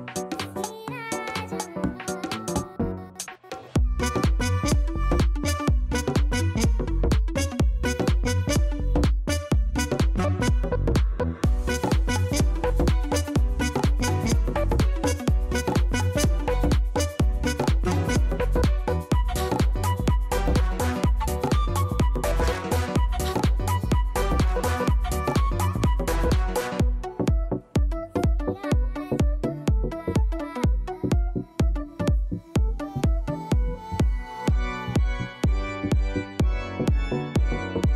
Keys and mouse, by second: 0.5 click, 2.5 click, 3.1 right click, 4.1 click, 5.1 click, 7.9 right click, 9.8 click, 10.3 click, 13.7 click, 20.9 click, 26.4 click, 27.5 click, 31.3 click, 32.0 click, 37.8 alt+right click.